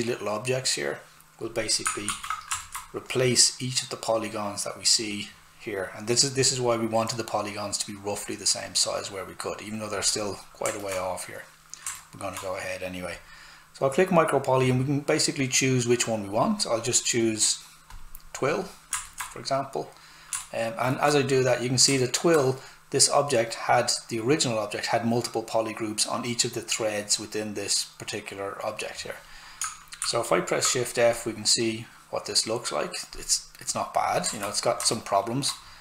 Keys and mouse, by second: 1.5 click, 2.1 shift+f, 2.6 alt+right click, 10.6 alt+Num_Lock, 10.6 alt+right click, 13.1 click, 17.9 click, 19.4 right click, 21.5 right click, 29.6 shift+right click, 30.0 shift+f, 31.1 click, 34.3 alt+right click, 35.7 click.